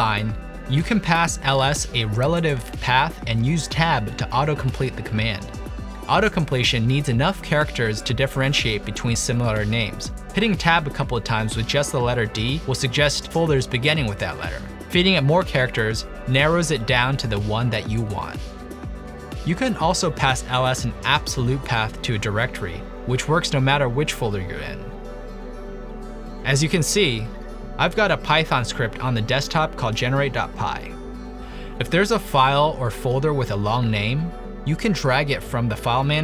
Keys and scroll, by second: 1.7-4.3 typing, 5.5 Return, 9.5 typing, 11.0-12.0 typing, 12.4 Tab, 12.8 Tab, 15.0-15.8 typing, 16.1 Tab, 20.7 Return, 21.2-25.1 typing, 25.1 Tab, 25.4 Return, 28.8 super+d, 31.9 super+d, 33.4-34.3 typing.